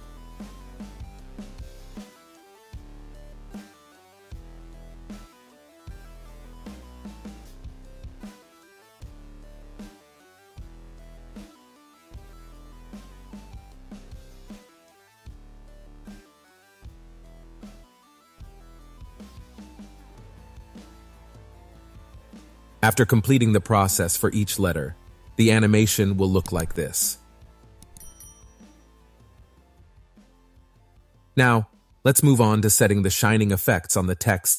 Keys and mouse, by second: 0.0 click, 0.6 click, 1.0 click, 1.3 click, 1.4 click, 2.1 click, 2.5 click, 2.8 click, 3.7 ctrl+z, 3.9 click, 4.6 click, 5.0 click, 5.7 click, 6.2-7.2 drag, 7.4 click, 8.2 click, 8.5 click, 9.2 click, 9.7 click, 11.3 click, 12.0 click, 12.2 click, 12.4 click, 13.2 click, 13.5 click, 13.6 click, 13.8 click, 14.3 click, 14.7 click, 15.3 click, 15.8 click, 16.0 click, 16.1 click, 16.5 click, 17.4 click, 18.3 click, 20.6 click, 21.5 click, 22.0 click, 22.7 click, 24.6 shift+space, 24.9 shift+click, 25.0 shift+middle click, 31.0 space, 33.0 click, 33.9 click.